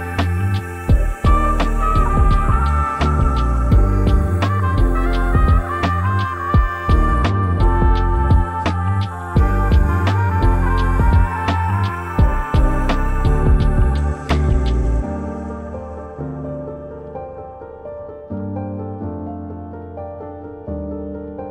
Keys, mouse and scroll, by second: 1.5-6.8 drag, 6.8-21.5 drag.